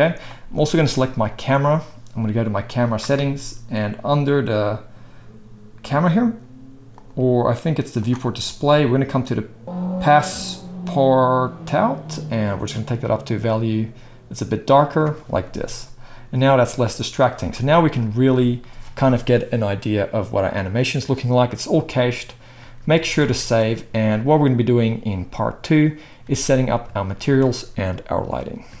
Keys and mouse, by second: 1.4-2.8 middle drag, 2.8 click, 2.9-6.0 middle drag, 6.0-28.8 drag, 22.8 ctrl+s, 23.3 ctrl+s, 26.2 space.